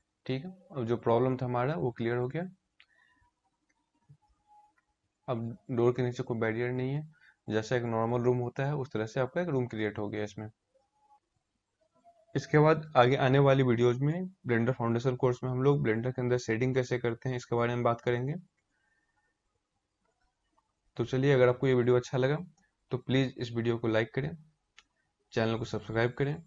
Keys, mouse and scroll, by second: 1.7-3.1 scroll down 1, 3.1-4.8 scroll down 1, 9.4-11.1 scroll down 4.